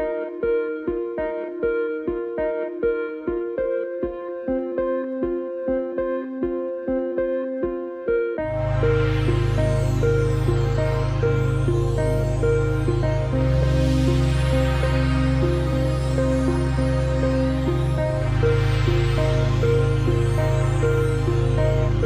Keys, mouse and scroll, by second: 1.0 ctrl+shift+o, 2.2 shift+m, 2.9 click, 4.6 v, 4.8 click, 7.2 click, 14.8 click, 15.8 shift+click, 16.8 shift+click, 21.2-21.7 scroll up 1, 21.7 a, 21.9 click.